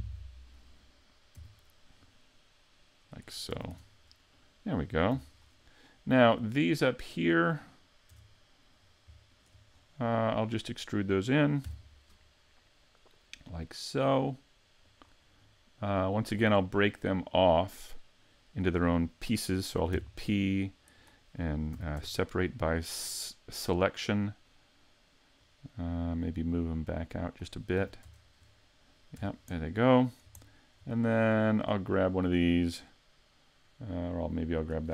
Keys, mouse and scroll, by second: 0.1 middle click, 1.4 e, 3.4 click, 3.5 a, 3.7 Tab, 3.9-4.4 scroll down 4, 4.4 middle click, 5.1 a, 5.5-5.9 scroll up 2, 5.9 middle click, 7.1 right click, 8.1 Tab, 8.8 right click, 9.3 shift+right click, 9.8-10.2 scroll up 1, 10.2 middle click, 11.7 e, 15.0 click, 15.4-15.9 scroll up 3, 15.9 middle click, 16.4-17.5 scroll down 2, 17.5 middle click, 20.0 p, 21.8 a, 22.0 Tab, 22.8 right click, 23.8-24.5 scroll down 2, 24.5 middle click, 26.5 click, 27.8 a, 28.1 Tab, 28.5 middle click, 29.2 Tab, 29.6 middle click, 30.5 shift+middle click, 31.6 right click, 34.6 right click.